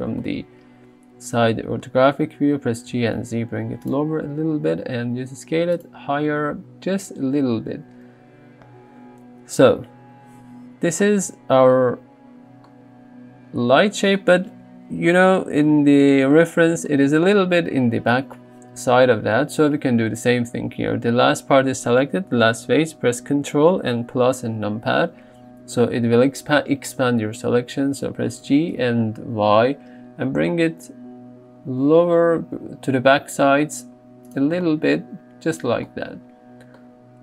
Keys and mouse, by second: 1.5 g, 3.0 z, 4.4 s, 5.8 click, 12.7 middle click, 15.0 KP_3, 24.2 ctrl+KP_Add, 28.5 g, 28.8 y, 34.3 click, 36.2 Tab.